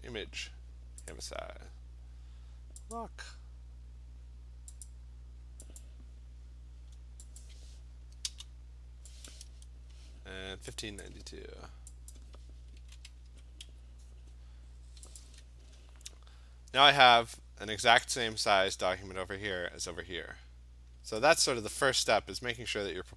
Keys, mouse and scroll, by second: 1.1 click, 3.0 click, 4.9 click, 5.8 click, 7.4 click, 9.3 click, 11.0 click, 12.2 click, 12.6-14.2 typing, 15.2 click, 21.4-23.1 drag.